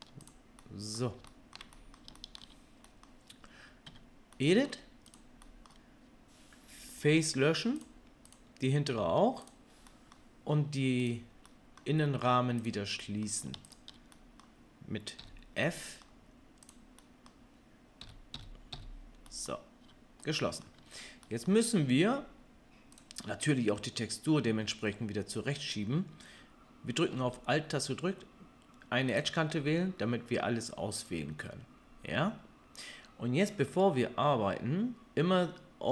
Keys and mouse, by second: 0.3-6.9 middle drag, 3.9 Tab, 7.0 Delete, 8.3 click, 8.8 Delete, 11.0-12.6 drag, 13.6 shift+click, 15.2 f, 16.7-18.0 middle drag, 18.0 f, 18.3 f, 18.7 f, 19.8 Tab, 20.8-23.0 middle drag, 21.2 Tab, 23.0-29.2 drag, 29.2-35.9 alt+middle drag.